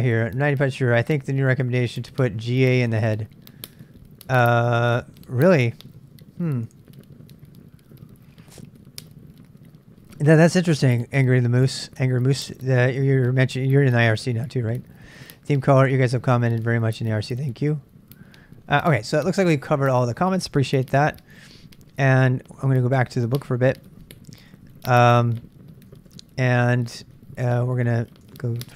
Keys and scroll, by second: 20.8 super+Tab, 24.3-28.7 super+Tab.